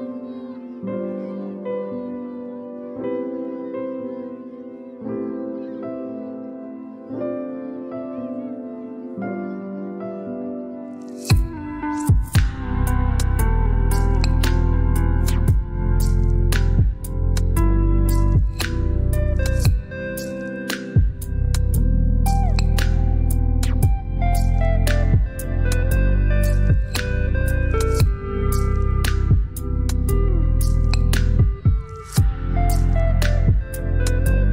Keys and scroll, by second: 0.3-1.0 typing, 1.6 Return.